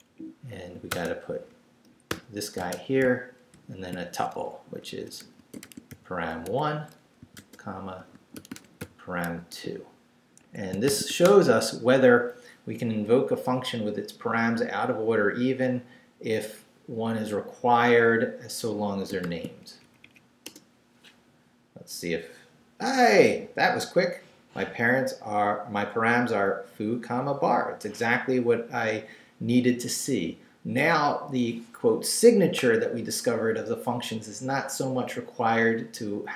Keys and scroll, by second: 0.9-3.5 typing, 4.3 shift+Left, 4.9-9.5 typing, 10.4 Escape, 10.6-11.6 typing, 19.2 shift+;, 19.8 shift+Up, 20.4 Return.